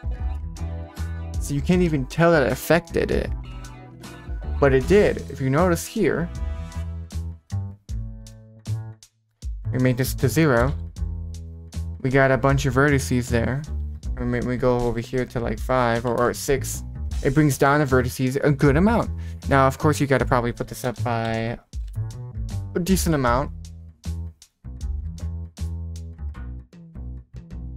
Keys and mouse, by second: 3.8 click, 5.0 middle click, 7.2-10.6 drag, 10.8 0, 13.2-16.6 drag, 20.1-22.4 drag, 24.5-26.0 drag.